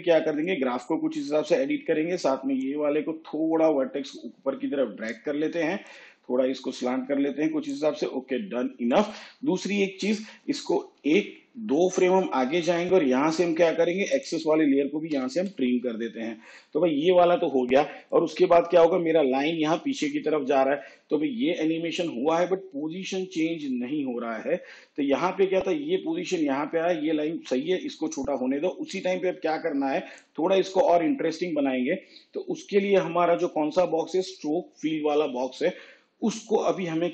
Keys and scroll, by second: 11.0 ctrl+Left, 15.2 alt+].